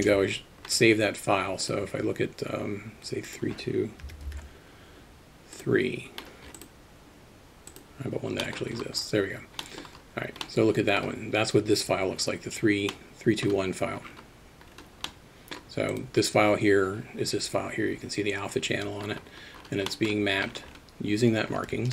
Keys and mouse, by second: 0.0 ctrl+space, 1.6-5.6 drag, 6.6-7.8 drag, 9.8 middle click, 10.4-11.0 middle drag, 13.0 middle click, 15.2 middle click, 15.9 click, 20.0 middle click.